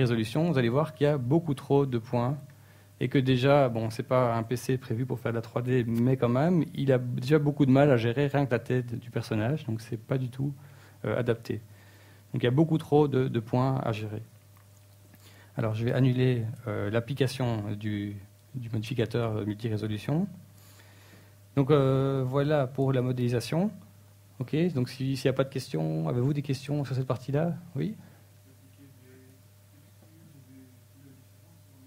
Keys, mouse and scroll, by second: 28.4-31.8 typing.